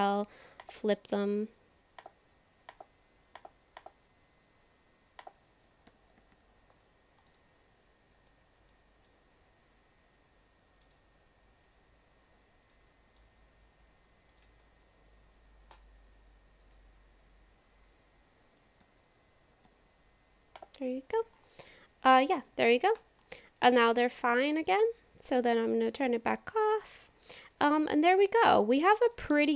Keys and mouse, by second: 0.0 alt+n, 2.0 click, 2.7 click, 3.3 click, 3.8 click, 5.2 click, 5.9 ctrl+l, 6.3 alt+n, 7.4 middle click, 8.7 middle click, 10.8 click, 11.5 KP_4, 11.7 click, 12.1 KP_4, 12.5 KP_4, 12.7 middle click, 16.6 click, 17.9 click, 18.9 ctrl+l, 19.6 alt+n, 21.7 click, 22.4 click, 23.0 Tab, 23.6 click, 25.2-26.7 drag, 26.8 click, 27.5 shift+middle click, 28.3 middle click, 29.4 shift+middle click.